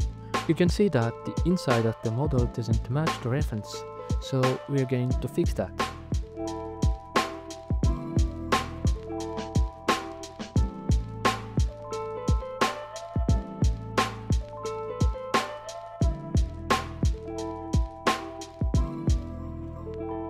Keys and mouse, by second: 1.6 alt+z, 2.5 Tab, 4.4 ctrl+right click, 4.9 right click, 5.3 c, 5.5 click, 5.7 right click, 7.0 ctrl+KP_Add, 7.3 ctrl+z, 7.9 alt+z, 8.2 KP_1, 9.6 ctrl+KP_Subtract, 9.7 f, 10.2 alt+z, 10.7 s, 12.5 g, 12.5 z, 13.4-14.2 drag, 14.6 g, 14.8 z, 18.5 s.